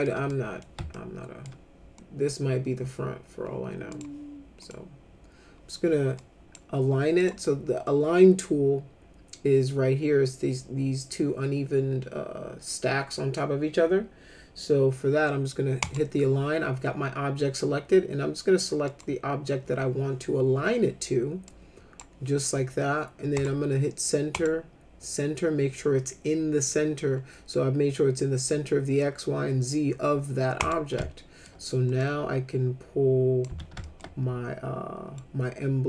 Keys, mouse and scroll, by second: 0.3 middle click, 0.9 alt+middle click, 3.9 click, 4.6 click, 6.1 click, 7.2 click, 15.8 click, 18.9 click, 21.5 click, 23.4 click, 24.3 click, 30.6 click, 31.0 alt+middle click, 32.0-33.4 drag, 33.5 z, 33.8 alt+middle click, 35.2 middle click.